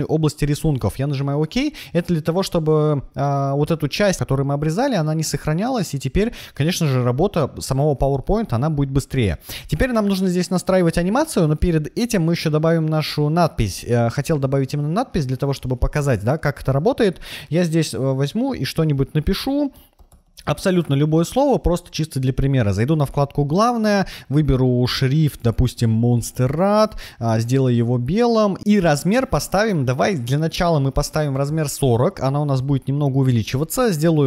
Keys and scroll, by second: 15.9 shift+p, 17.1 BackSpace, 18.8-20.9 typing, 29.3 BackSpace, 31.0-31.9 typing.